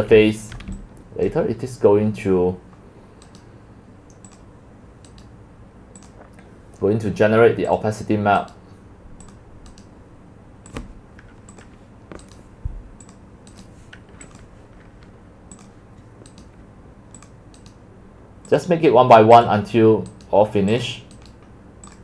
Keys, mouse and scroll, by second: 0.6 click, 1.4-3.4 drag, 3.4-4.4 right drag, 4.4-5.1 drag, 5.1 right click, 6.1 right click, 6.1-8.5 drag, 8.6-8.9 right drag, 9.1 click, 9.3 right click, 9.4-9.8 drag, 11.7 click, 13.5 click, 13.7-14.1 drag, 14.4-15.9 drag, 15.9-18.9 right drag, 19.1-20.3 drag, 20.3 right click.